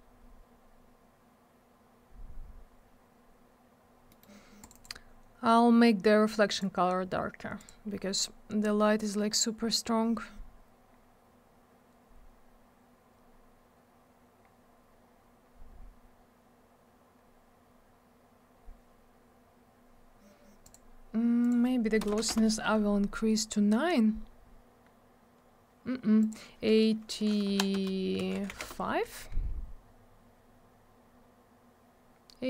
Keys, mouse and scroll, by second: 0.0-1.1 scroll down 1, 4.1 middle click, 4.2 middle click, 4.6 click, 4.7 double click, 4.7 click, 4.8 click, 6.5 click, 6.6 click, 7.6 click, 7.6 click, 10.4-10.9 scroll up 1, 10.9-11.9 scroll down 1, 13.1-14.4 scroll up 1, 14.4 scroll down 1, 15.4-16.8 scroll up 1, 16.8 scroll down 1, 20.6 click, 20.7 click, 21.4 click, 21.5 click, 22.0 BackSpace, 22.2 9, 22.3 Return, 23.4 scroll up 1, 24.9 scroll down 1, 26.2 click, 26.3 click, 27.5 Right, 27.8 BackSpace, 28.2 8, 28.6 Return, 29.6-30.1 scroll up 1, 30.8-31.9 scroll down 1.